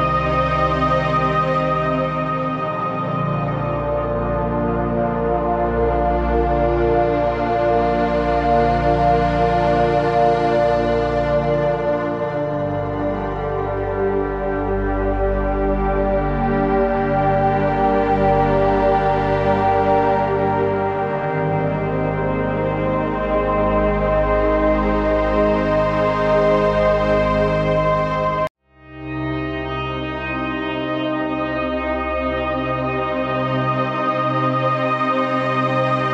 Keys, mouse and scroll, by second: 0.7-2.5 alt+shift+drag, 2.5-3.0 typing, 2.7 click, 3.8 click, 6.9 scroll down 1, 7.1-9.5 typing, 7.5 click, 7.9 click, 8.2 click, 8.5 click, 8.7 click, 10.1 click, 16.9 click, 21.9 click, 31.7 click, 33.2 Left, 34.9 click.